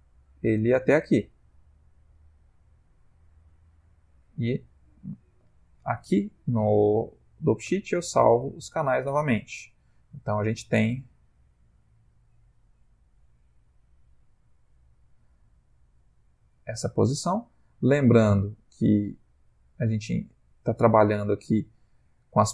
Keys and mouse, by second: 7.6 i, 8.9 click, 10.1 space, 15.1 Escape, 16.0 click.